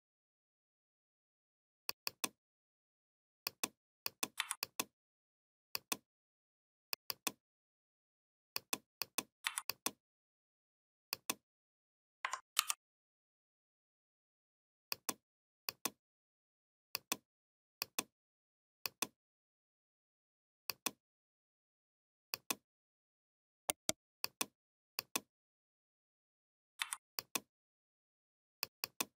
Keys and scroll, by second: 4.2 v, 9.3 v, 12.4 ctrl+g, 26.6 v.